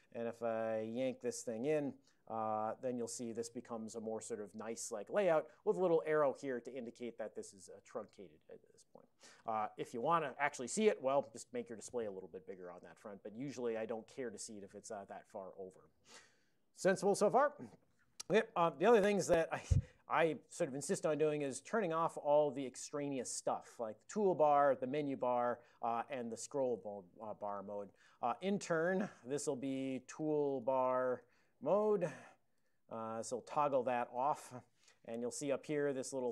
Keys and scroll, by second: 1.1 ctrl+y, 4.9 Down, 11.2 super+m, 18.8 super+j, 20.2 ctrl+a, 21.8 ctrl+n, 24.7 ctrl+n, 26.1 ctrl+n, 28.8 super+j, 29.6 alt+x, 29.7-32.1 typing, 33.2-34.7 typing.